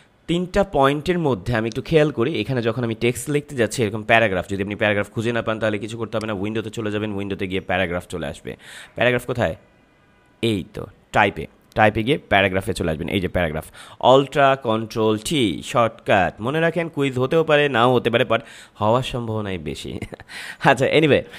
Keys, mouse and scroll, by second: 6.1 click.